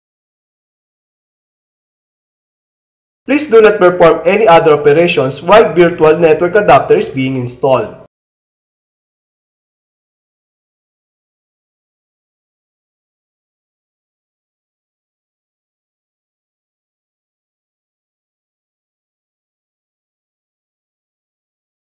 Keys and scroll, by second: 1.2 Return.